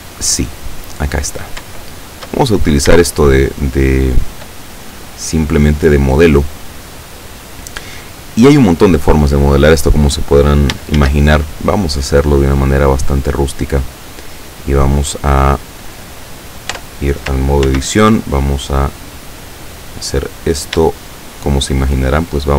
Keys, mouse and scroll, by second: 0.6 click, 1.8-2.4 shift+middle drag, 2.4-3.1 shift+scroll up 1, 3.1-4.6 shift+middle drag, 11.0 shift+a, 12.0 click, 14.1 click, 16.7 Tab, 17.7 ctrl+r, 18.8 click, 19.3 click, 20.7 shift+right click, 21.5 shift+right click.